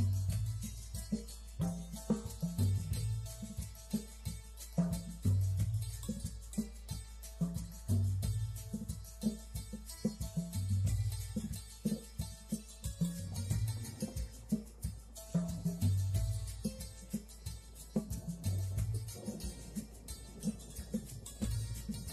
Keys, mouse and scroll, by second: 0.4 click, 1.3 e, 4.0 ctrl+z, 5.0 click, 9.4 click, 10.7 click, 12.2 click, 12.9 click, 13.4 click, 13.7 click, 14.6 click, 16.6 click, 16.9 click, 17.9 click, 21.8 click.